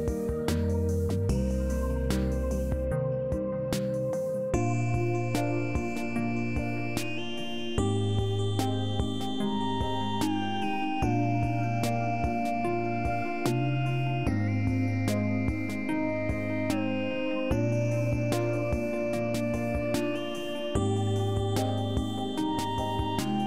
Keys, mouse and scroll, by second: 6.6 click, 8.4 click, 9.3 click, 10.1 shift+s, 16.6 shift+s, 20.4 shift+s, 21.5 shift+s, 23.2 shift+s.